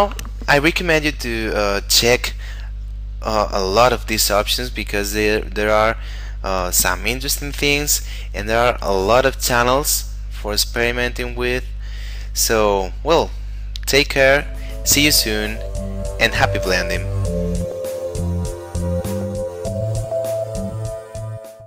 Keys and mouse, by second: 3.2 middle click, 13.6 middle click.